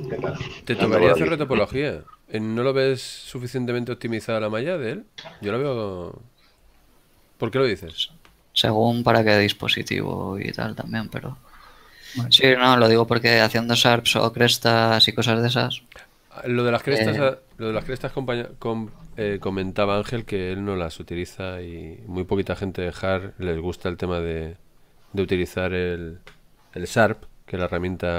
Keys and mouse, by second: 4.2 click, 10.2 shift+middle click, 12.5 click, 13.6 shift+middle click, 16.6 middle click, 20.9 Tab.